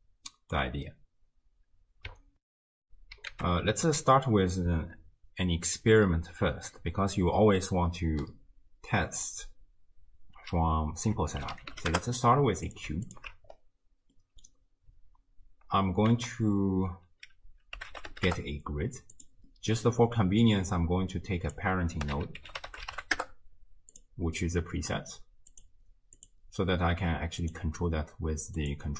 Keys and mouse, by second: 0.3 drag, 2.4 ctrl+alt+shift+w, 2.9 x, 3.4 ctrl+a, 13.1 alt+shift+click, 14.2 middle drag, 16.2 ctrl+a, 19.5 middle drag, 21.3-24.2 drag, 25.5 click, 27.4 click.